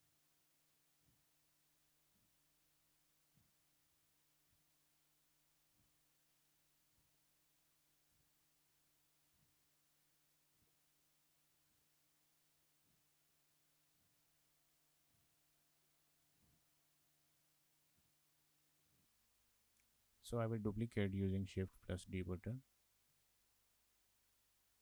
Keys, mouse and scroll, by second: 0.0-0.8 scroll down 4, 0.2 shift+middle click, 0.5 shift+middle click, 0.8 shift+middle click, 1.1-2.1 scroll up 6, 2.6 shift+middle click, 2.8 scroll down 3, 3.0 shift+middle click, 3.3 scroll up 7, 3.5 shift+middle click, 4.0 3, 4.2 click, 4.3 shift+click, 4.4 shift+click, 4.6 shift+click, 4.8 shift+click, 5.1 shift+click, 5.2 shift+click, 5.4 shift+click, 5.6 shift+click, 5.6 shift+click, 6.1 click, 6.5 click, 8.3 click, 9.1 shift+middle click, 9.3 scroll down 3, 9.4 shift+middle click, 9.8 alt+shift+click, 10.2 alt+shift+click, 11.1 shift+middle click, 11.6 shift+click, 11.9 shift+middle click, 12.1 shift+middle click, 12.7 alt+shift+click, 13.1 alt+shift+click, 13.6 shift+click, 13.7 shift+click, 14.0 shift+click, 14.2 shift+click, 14.8 click, 15.1 click, 15.3-15.6 scroll down 6, 15.6 click, 17.1 shift+middle click, 18.4 Tab, 18.8 scroll down 3, 18.8 shift+middle click, 21.6 shift+d.